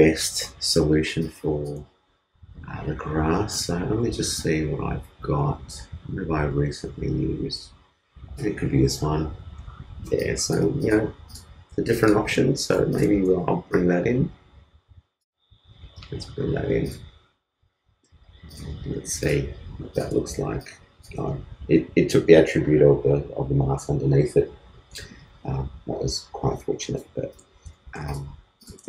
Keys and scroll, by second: 27.4 super+t, 27.8 super+space.